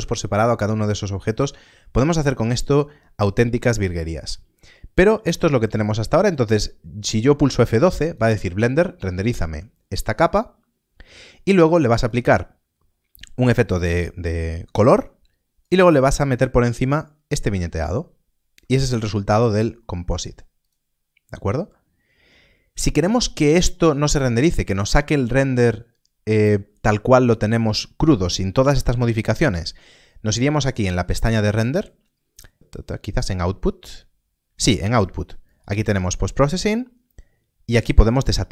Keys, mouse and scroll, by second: 3.7 middle click, 4.4-4.9 scroll down 1, 5.0 middle click, 8.0 click, 11.9 click, 15.5 click, 18.8 click, 19.3-19.8 scroll up 1, 19.8 middle click, 20.6 click, 23.7 click, 24.2-24.9 scroll down 1, 24.9 middle click, 30.5 middle click, 35.4 click, 36.0 middle click, 38.0 middle click.